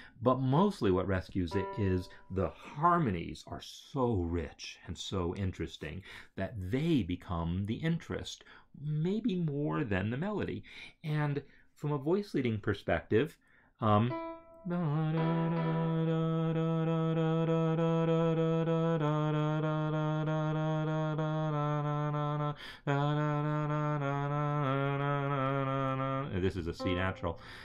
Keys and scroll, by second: 14.9 Right.